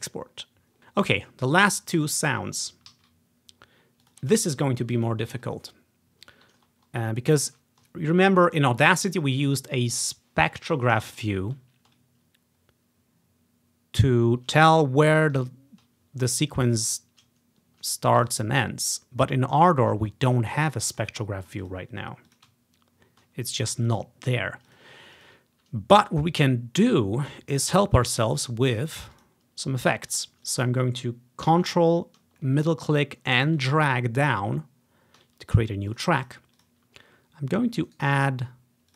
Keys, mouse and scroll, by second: 0.1 click, 2.2 click, 3.0 z, 4.2-5.6 ctrl+drag, 6.8 ctrl+scroll up 2, 7.7 ctrl+scroll down 2, 8.2-9.3 scroll down 1, 9.6-10.7 scroll up 1, 10.7-11.2 scroll up 1, 11.2-13.3 ctrl+scroll down 1, 15.1-16.0 ctrl+scroll down 2, 17.6 scroll down 1, 18.3 click, 20.0 click, 21.1 click, 21.8 click, 22.4 click, 22.8 ctrl+scroll up 2, 23.1 ctrl+scroll down 2, 23.9 click, 24.2-26.5 drag, 27.6-28.9 middle drag, 28.9 click, 29.3 click, 29.7 scroll down 1, 30.2 click, 30.6 click, 32.5-35.7 middle drag, 35.7 click, 36.0 click, 36.3 click, 36.7 click, 38.0 right click.